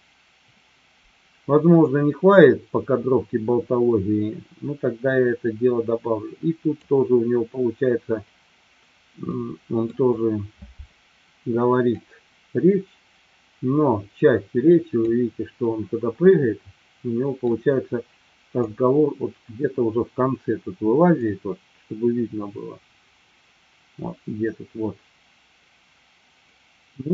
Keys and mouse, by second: 9.3-10.0 middle drag, 12.6-16.0 drag, 16.3-17.5 middle drag, 19.3-27.1 drag.